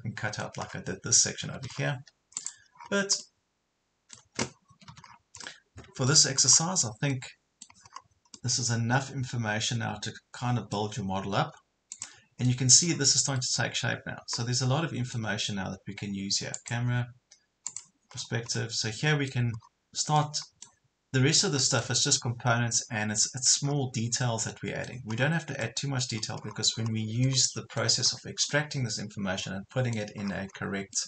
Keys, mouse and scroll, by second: 0.7 scroll down 1, 1.4 Escape, 1.5 scroll down 1, 1.7 Escape, 2.4 click, 2.8 scroll up 1, 4.7 Escape, 5.1 scroll down 1, 5.5 middle click, 6.5 scroll up 1, 7.1 middle click, 7.9 scroll up 1, 8.3-11.6 middle drag, 11.9 click, 12.9-13.4 scroll down 1, 13.4-15.5 middle drag, 16.5 click, 18.1 scroll down 1, 18.5 middle click, 19.7 scroll up 1, 20.2-22.1 middle drag, 22.1 scroll up 1, 22.7 middle click, 23.7 scroll down 1, 24.3 middle click, 25.1 scroll down 1, 25.6 middle click, 26.4 scroll up 1, 27.3 middle click, 28.1 scroll up 1, 28.5 middle click, 30.0 scroll up 1, 30.2 scroll down 1, 30.9-31.0 middle drag.